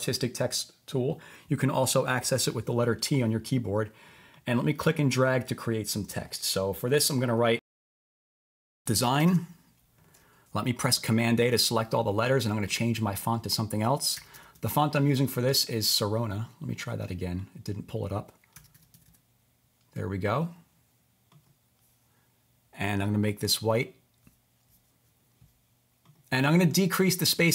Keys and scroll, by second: 8.4-9.7 typing, 11.0 super+a, 13.9-15.1 typing, 18.3-19.5 typing.